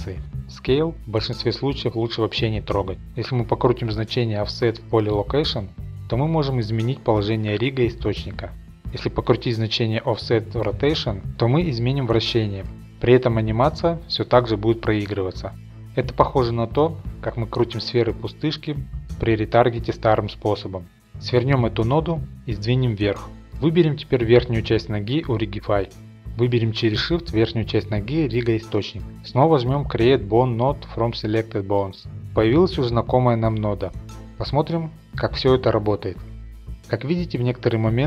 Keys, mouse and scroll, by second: 2.8 click, 4.4 1, 7.5 click, 10.6 click, 13.5 click, 15.6 click, 15.9 click, 19.9 click, 20.0 click, 20.8-21.2 scroll, 21.5 click, 22.4 scroll, 23.2 scroll, 23.4 click, 23.9 scroll, 24.2 shift+middle click, 24.9 click, 25.6 ctrl+Tab, 25.9 click, 26.6 shift+middle click, 27.6 shift+click, 28.4 ctrl+Tab, 30.6 click, 32.4 scroll, 34.6 click.